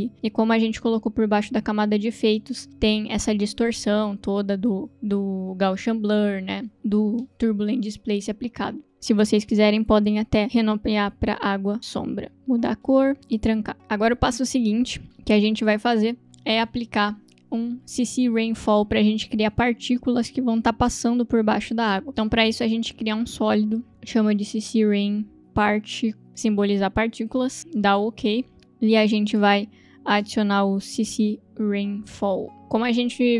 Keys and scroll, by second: 10.4 Return, 10.9-12.1 typing, 12.3 Return, 23.5 ctrl+v, 24.2-26.4 typing, 30.4 ctrl+space, 30.9-32.6 typing.